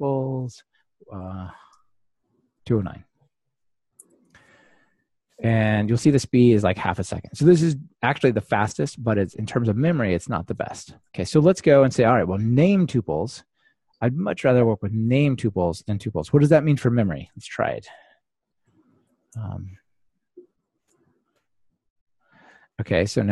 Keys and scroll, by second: 11.0 super+/, 13.2 super+/, 15.4 super+/, 17.8 super+/, 18.0 ctrl+r.